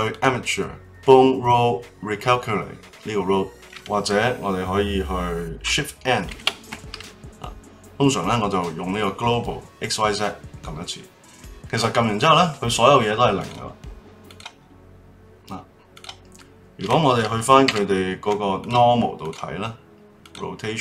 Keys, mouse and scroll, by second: 0.1-2.2 drag, 6.3 shift+n, 12.2 click, 13.4 click, 14.2 click, 15.9 click, 16.4-17.6 middle drag, 17.6 ,, 19.2 click, 20.2 click.